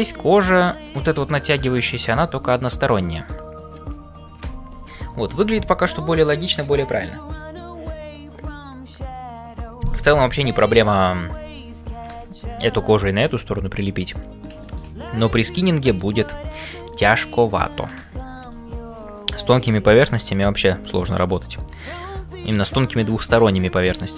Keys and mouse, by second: 0.0-24.1 typing, 1.7-3.4 middle drag, 14.6 shift+middle click, 15.4 middle click, 16.9 shift+middle click, 17.4 middle click, 18.4 click, 19.2 click, 19.8 middle click, 22.3-24.1 middle drag.